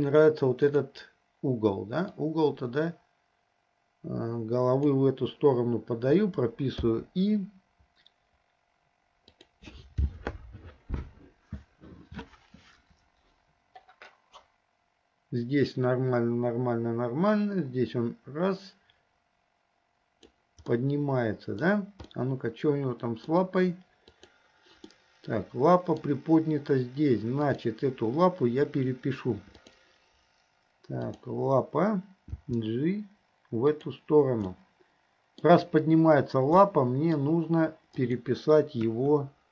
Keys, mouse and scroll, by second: 0.7 click, 2.1-5.2 drag, 6.9 i, 9.4 click, 14.5-20.4 drag, 20.7 middle click, 22.1-23.3 middle drag, 24.2 click, 25.0-26.0 middle drag, 27.4 click, 29.6 click, 31.1 click, 32.4 g, 34.6 middle click, 36.7-37.2 middle drag, 38.0 click, 38.9 KP_1.